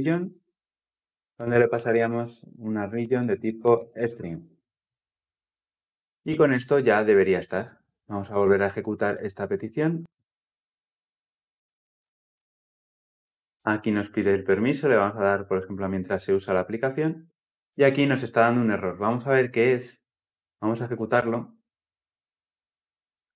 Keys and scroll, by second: 8.9 shift+F10, 19.3 ctrl+F8, 20.0 ctrl+F8, 20.8 shift+F9.